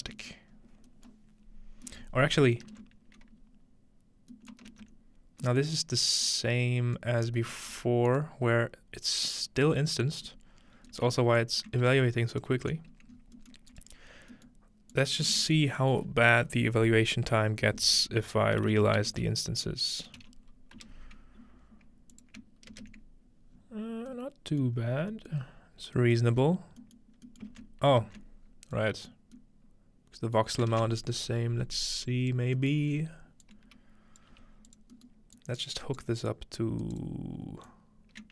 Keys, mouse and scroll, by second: 0.5-2.2 scroll up 2, 0.7-1.9 middle drag, 2.1 middle click, 2.2-4.1 scroll down 1, 2.6 middle click, 4.1-5.6 scroll down 1, 4.7 ctrl+space, 6.2-7.6 drag, 7.2-8.4 scroll down 2, 7.7 g, 8.1 click, 8.4 scroll up 1, 9.3 click, 10.3 g, 10.5 click, 10.9-12.9 shift+right drag, 11.0 shift+middle click, 11.8 click, 11.8-12.8 middle drag, 11.8 typing, 12.5-17.1 drag, 13.1-15.1 scroll up 1, 15.3 typing, 18.7-20.2 typing, 20.8 Return, 22.1-23.0 ctrl+drag, 23.5-24.8 scroll down 2, 24.1 middle click, 24.8 scroll up 2, 24.9 middle click, 25.5 middle click, 25.7 scroll down 1, 26.3-26.8 middle drag, 26.3 scroll up 1, 27.0 middle click, 27.5-28.5 ctrl+middle drag, 28.5-30.1 scroll down 2, 31.0 space, 31.1-31.8 scroll down 1, 32.1 click, 32.9 scroll up 1, 33.4-36.3 drag, 34.2-34.5 scroll up 1, 34.3 g, 35.8-37.1 right drag, 36.8 click, 37.7 click.